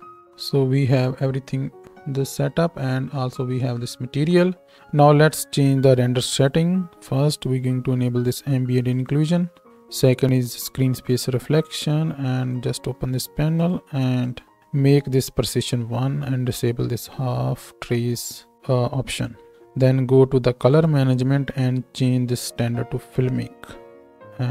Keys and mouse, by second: 6.5-8.9 right drag, 9.0-11.1 right drag, 11.3 right click, 13.8-14.2 right drag.